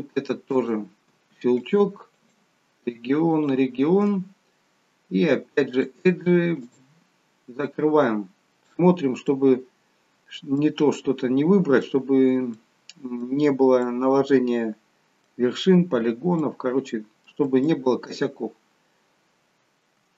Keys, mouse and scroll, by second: 0.4 click, 1.6 alt+shift+click, 2.1 alt+shift+click, 5.6 click, 7.2-7.8 scroll down 2, 7.6 middle click, 9.2 middle click, 12.5 middle click, 13.8 middle click, 15.9-16.4 scroll down 1, 16.4 middle click, 17.6 shift+middle click, 18.3 scroll up 2.